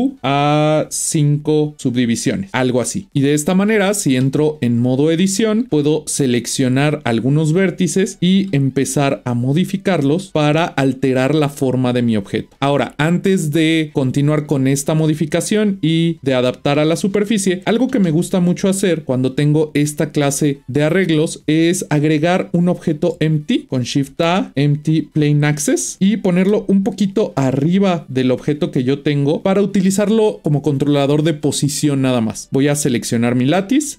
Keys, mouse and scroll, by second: 0.1-3.1 drag, 4.8 Tab, 5.7 click, 8.4 g, 18.6 Tab, 19.0-20.8 scroll down 2, 21.5 scroll up 2, 22.0-24.1 middle drag, 24.1 shift+a, 26.0-26.4 scroll down 1, 26.4 g, 33.1 click.